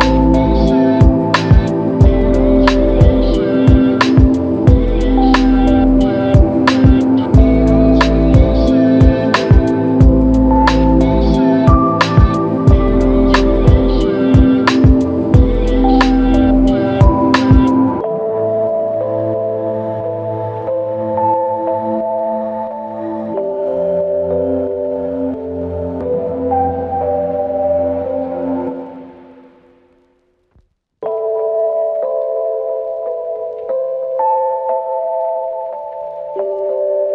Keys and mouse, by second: 6.4 shift+click, 8.4 shift+click, 11.5 ctrl+alt+click, 12.5 alt+click, 14.3 f, 16.0 double click, 24.9 alt+click, 26.9 double click, 28.1 alt+click, 29.5 double click, 32.6 alt+click, 34.1 shift+click, 35.0 shift+l, 36.2 alt+click.